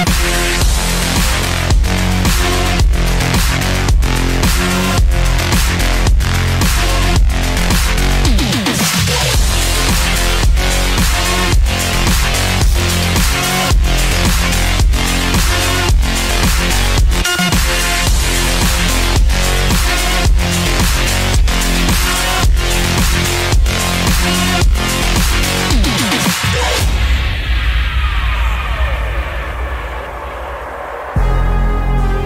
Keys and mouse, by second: 1.5-3.9 middle drag, 6.1 ctrl+r, 12.9 ctrl+z.